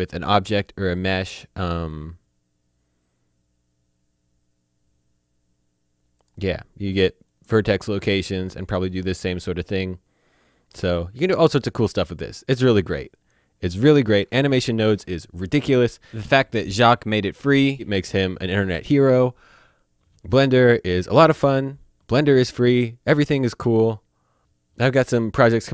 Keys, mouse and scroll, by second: 4.8 click, 6.2 click, 13.1 click, 14.2 Delete.